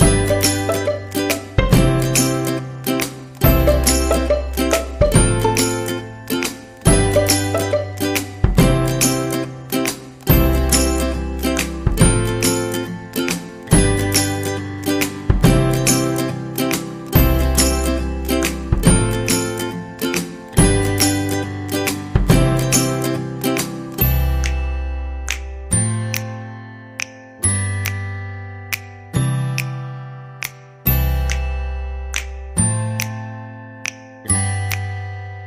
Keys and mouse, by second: 0.2 alt+z, 0.7 g, 2.2 right click, 2.4 g, 3.1 shift+middle click, 4.9 shift+middle click, 9.3 shift+middle click, 9.9 alt+z, 10.3 x, 13.0 middle click, 16.2 right click, 16.6 x, 18.2 shift+middle click, 20.5 right click, 20.9 r, 22.9 shift+right click, 24.1 shift+right click, 26.5 f, 27.9 shift+middle click, 28.8 shift+middle click, 30.6 right click, 31.0 g, 31.9 r, 34.6 r.